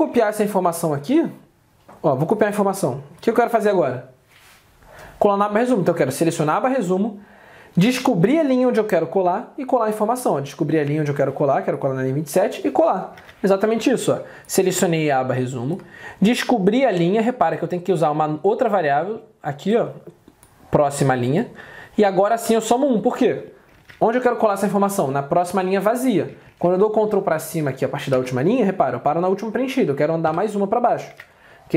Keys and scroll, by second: 0.2 alt+Tab, 3.6 ctrl+c, 13.3 alt+Tab, 23.9 alt+Tab, 26.6 ctrl+Down, 28.2 ctrl+Up, 31.2 alt+Tab.